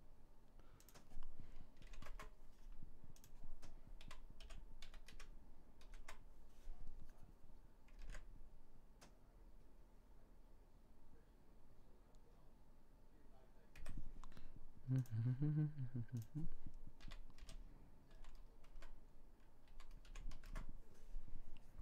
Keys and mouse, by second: 2.0 middle click, 3.0-4.9 middle drag, 7.8 alt+a, 13.9 Escape, 19.3-21.8 middle drag.